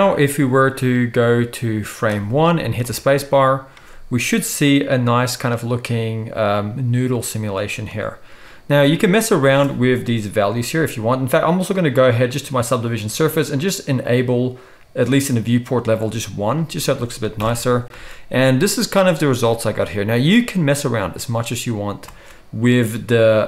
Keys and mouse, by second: 2.8 space, 9.4 space, 11.5-12.7 middle drag, 17.4 shift+Left, 17.9 space, 22.1 space.